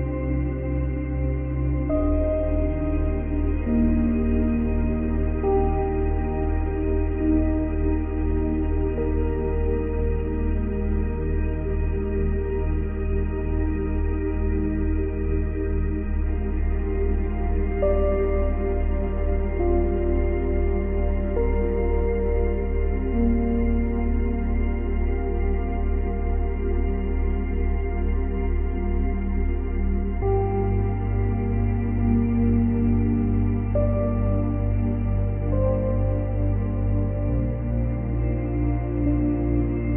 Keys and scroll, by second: 6.9 space, 10.5 space.